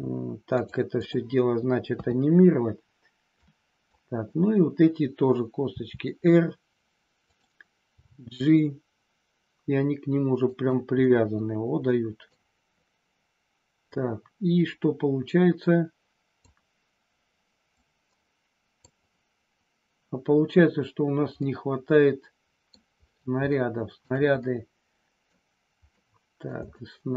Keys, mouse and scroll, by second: 0.5 click, 1.9 KP_3, 3.4 click, 5.7 r, 7.3 click, 7.9 g, 10.5 click, 11.0 scroll up 1, 11.1-12.3 middle drag, 13.9-16.4 drag, 17.8-18.9 drag, 21.4 scroll up 1, 21.5-22.7 middle drag, 22.7 scroll down 1, 23.4 scroll up 1, 23.7 shift+middle click, 24.4 middle click, 26.0 middle click, 26.7 scroll up 1, 26.8 shift+middle click.